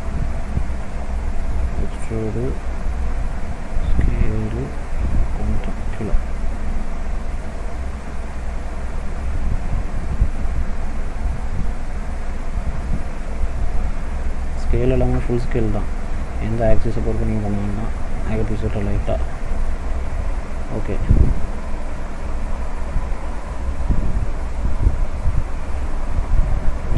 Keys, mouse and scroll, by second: 0.9 e, 3.5 s, 6.0 click, 7.7 middle click, 8.2-8.6 scroll up 1, 8.8 middle click, 9.6-10.1 scroll up 1, 10.1 middle click, 11.3 click, 12.4 e, 14.6 s, 17.4 middle click, 18.6 click, 19.3-19.7 scroll down 1, 19.7 middle click, 21.2 middle click, 21.6-22.1 scroll down 1, 22.1 middle click, 22.5-23.6 scroll down 3, 23.6 middle click, 23.6 scroll down 1, 25.0 middle click, 25.7-26.9 scroll down 2.